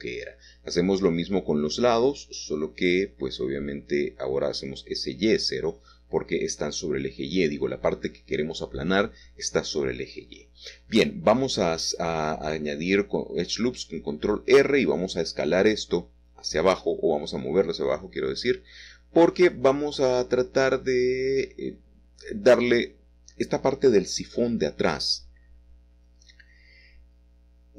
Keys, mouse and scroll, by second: 0.2 0, 0.9 Return, 3.0 click, 4.9 s, 5.4 y, 5.5 0, 5.8 Return, 8.4 middle click, 8.7-10.5 middle drag, 12.8 typing, 13.9 typing, 15.2 click, 15.2 typing, 16.3 typing, 19.0 click, 20.4 click, 20.4-21.4 typing, 23.7-24.9 drag, 25.0 middle click.